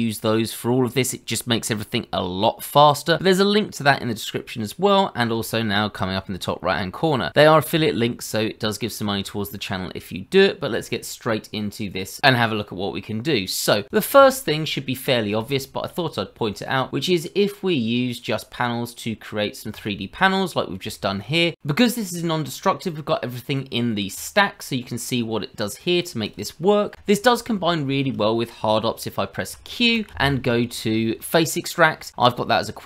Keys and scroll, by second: 30.0 q.